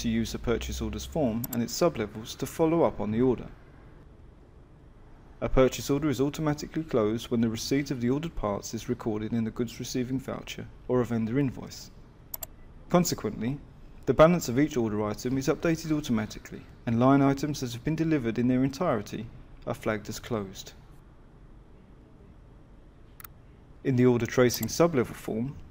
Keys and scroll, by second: 1.8 F11, 4.5 Return.